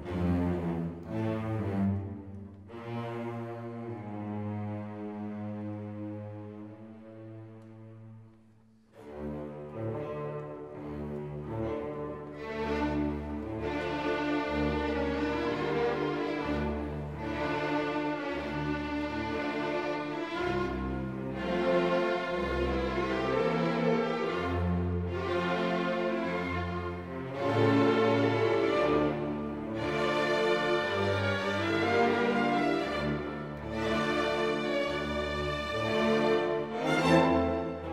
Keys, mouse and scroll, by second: 0.0 Delete, 0.0 right click, 0.3 scroll up 1, 0.3 alt+click, 9.1 click, 9.1 right click, 9.2 scroll down 1, 9.3 click, 9.6 right click, 11.1 click, 11.7 right click, 12.1 click, 12.2 right click, 12.3 alt+click, 12.4-16.0 typing, 12.5 alt+middle click, 12.6 alt+scroll up 1, 12.8 right click, 12.8 click, 13.2 alt+middle click, 13.3 shift+right click, 13.4 click, 13.6 right click, 13.7 click, 14.3 click, 14.5 middle click, 14.6 click, 14.8 scroll up 1, 14.9 click, 15.1 alt+click, 15.2 alt+click, 15.5 scroll down 1, 15.6 alt+click, 16.0 alt+click, 16.3 alt+click, 16.7 shift+right click, 16.8 scroll down 1, 17.1 click, 17.6 space, 17.8 e, 17.9 click, 18.0 scroll up 1, 18.1 click, 18.2 scroll down 1, 18.3 alt+click, 18.4 shift+right click, 18.5 ctrl+middle click, 18.7 click, 18.7 middle click, 18.8 alt+click, 19.0 right click, 19.0 click, 19.3 right click, 19.4 click, 19.6 Delete, 19.7 alt+click, 20.4 click, 20.4 right click, 20.5 click, 21.0 scroll down 1, 21.2-22.4 typing, 21.3 click, 21.6 click, 22.0 shift+right click, 22.0 click, 22.5 click, 23.0 right click, 23.4 alt+scroll up 2, 23.5 alt+click, 24.0 alt+scroll up 1, 24.2 click, 24.3 ctrl+click, 24.7 shift+right click, 25.0 right click, 25.2 click, 25.4-26.8 typing, 25.5 click, 25.7 shift+right click, 25.8 click, 25.9 Return, 26.1 shift+click, 26.5 click, 26.9 click, 27.4 Delete, 27.5 click, 27.6 scroll up 1, 27.6 click, 27.7 right click, 27.8 click, 28.3 right click, 28.4 click, 28.6 scroll up 1, 28.8 click, 28.8-33.2 typing, 28.9 click, 29.2 Return, 29.2 click, 29.6 shift+right click, 29.8 click, 30.1 click, 30.2 alt+click, 30.4 click, 30.7 shift+click, 31.4 scroll up 1, 31.5 click, 31.6 right click, 31.7 click, 31.7 alt+scroll down 1, 31.8 alt+click, 32.4 ctrl+shift+Print, 32.5 Escape, 32.6 click, 33.0 Return, 33.1 click, 33.3 scroll down 1, 33.4 scroll up 1, 33.8 click, 34.0 scroll down 1, 34.4 1, 34.6 click, 37.6 click.